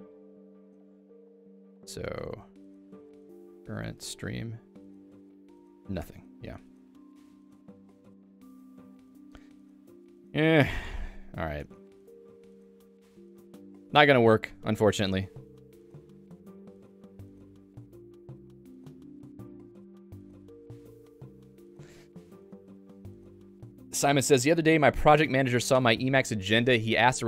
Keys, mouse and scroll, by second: 21.3 click, 21.6 Escape.